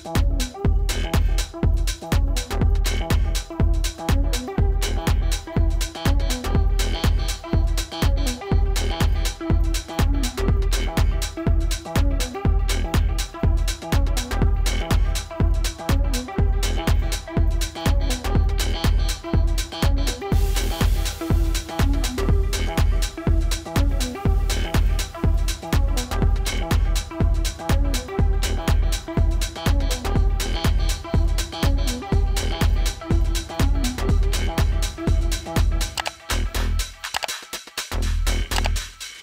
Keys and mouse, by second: 3.5 typing, 5.7-6.1 typing, 7.3 -, 7.9 click, 8.1 right click, 10.8 click, 24.6 -, 27.6 click, 33.7 right click, 35.6 click.